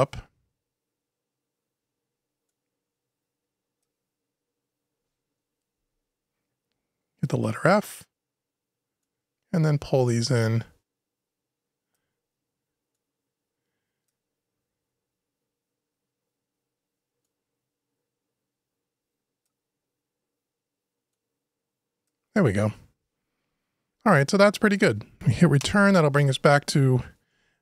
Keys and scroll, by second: 25.4 Return.